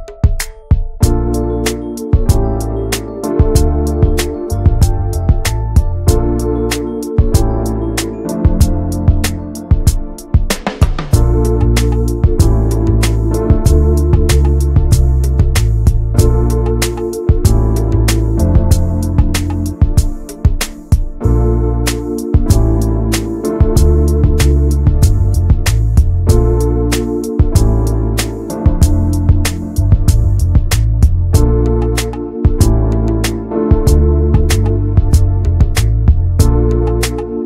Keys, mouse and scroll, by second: 0.0 ctrl+r, 1.2 click, 1.5 alt+middle click, 1.7 alt+middle click, 2.3 click, 5.6 click, 6.2 alt+z, 6.4 click, 7.3 click, 11.3-12.7 drag, 12.7 ctrl+z, 13.0 click, 14.1 middle click, 14.4 alt+z, 14.7 middle click, 15.0 scroll up 1, 15.3 shift+middle click, 15.8 3, 16.1 click, 16.9 2, 17.0 click, 17.3 alt+shift+click, 17.9 middle click, 18.7 ctrl+b, 24.5 Tab, 24.9 middle click, 25.3 click, 25.5 right click, 26.0-27.1 middle drag, 27.1 click, 27.6 click, 28.3 click, 29.3 click, 30.1 click, 30.3 middle click, 30.6 ctrl+s, 32.1 scroll up 1, 32.2 middle click, 32.7 alt+z, 33.3 shift+middle click, 33.7 3, 33.8 click, 34.6-36.9 middle drag, 36.9 alt+z.